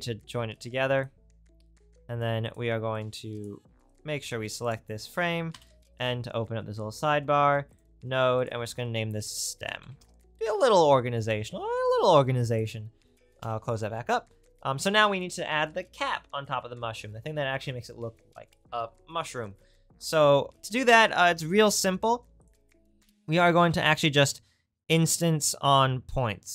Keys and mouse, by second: 1.7 click, 2.5 right click, 3.0-4.7 drag, 4.7 right click, 5.5-8.5 drag, 5.5 n, 13.4 n, 21.3 shift+a.